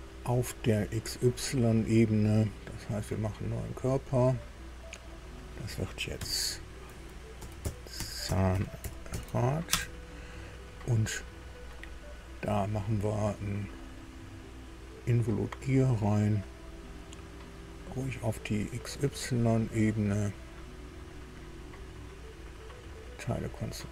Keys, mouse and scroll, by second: 3.7 click, 5.4 click, 6.1 F2, 7.1-9.6 typing, 9.7 Return, 11.6-11.9 scroll down 1, 18.4 click, 18.8 scroll down 1, 20.9 click, 23.0 click.